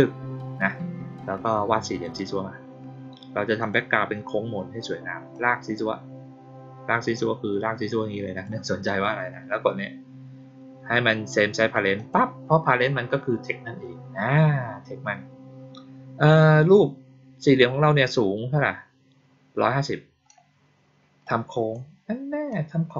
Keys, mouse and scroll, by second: 2.0 click, 3.5 click, 5.2-8.4 drag, 11.9 click, 21.2 click.